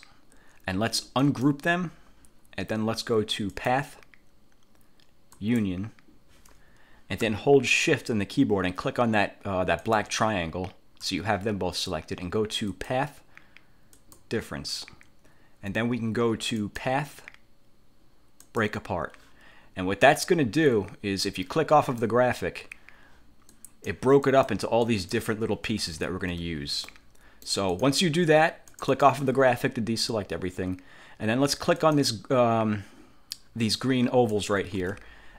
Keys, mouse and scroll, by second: 1.3 click, 3.7 click, 5.5 click, 10.0 shift+click, 12.8 click, 14.1 click, 16.8 click, 18.6 click, 22.0 click, 23.6 click, 24.4 click, 25.0 click, 25.8 ctrl+z, 27.0 ctrl+click, 28.8 click, 31.9 click, 33.9 click, 34.9 ctrl+z.